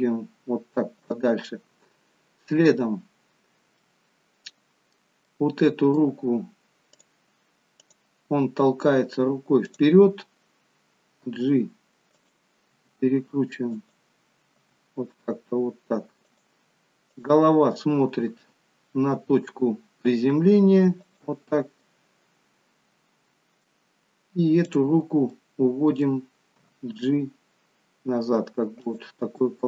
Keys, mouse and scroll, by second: 3.8 middle click, 5.3 middle click, 7.0 click, 7.8 click, 11.4 g, 12.9 r, 17.1 click, 19.1 r, 21.8 middle click, 24.7 click, 25.3 middle click, 26.8 g, 29.4 middle click.